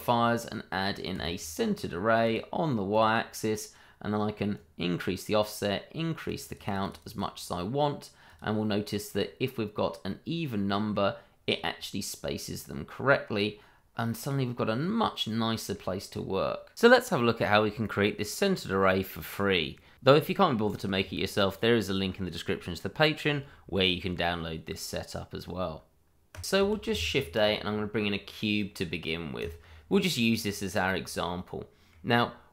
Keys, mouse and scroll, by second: 6.5 double click, 8.9 middle click, 12.4 click, 14.6-15.0 scroll down 1, 15.0 middle click, 17.2 click, 19.4 shift+middle click, 19.5 middle click, 19.6 shift+middle click, 19.9-25.9 scroll up 1, 26.8 shift+a, 29.3 click, 30.7 scroll down 1, 31.0 middle click, 32.4 click.